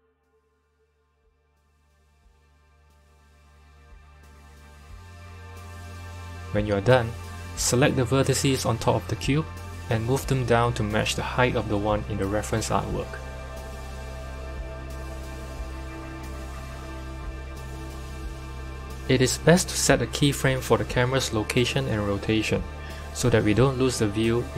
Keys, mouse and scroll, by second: 1.5 g, 6.8 click, 7.4 Tab, 7.9 click, 8.5 g, 13.4 Tab, 14.6 click, 19.0 click, 24.0 click.